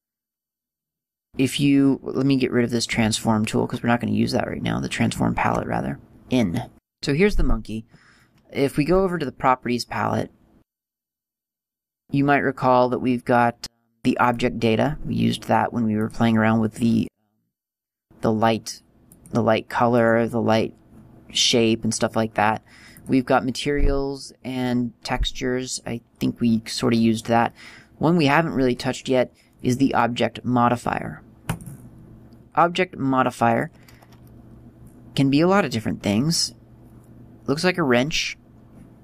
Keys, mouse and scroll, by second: 4.4 scroll up 1, 5.9 scroll down 1, 19.0 click, 22.9 click, 31.4 click.